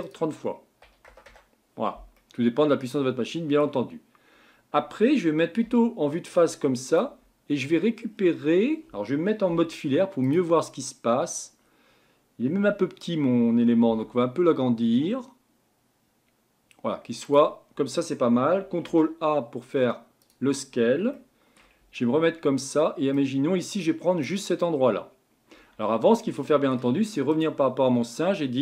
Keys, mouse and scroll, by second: 0.0-2.2 drag, 2.2-5.6 middle drag, 5.6 KP_1, 6.9 click, 9.5 z, 10.8-11.6 scroll up 2, 11.6-12.7 scroll down 1, 12.7 Tab, 13.9 s, 18.8 ctrl+a, 21.1-21.8 shift+middle drag, 21.8 Tab, 23.1 click, 25.6 Tab, 26.2-27.3 middle drag, 27.3 click.